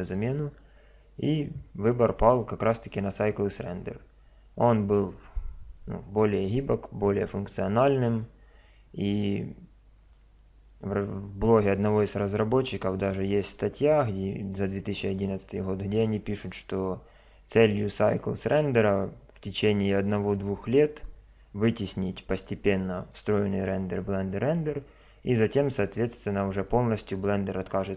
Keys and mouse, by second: 2.1 click, 22.0 click.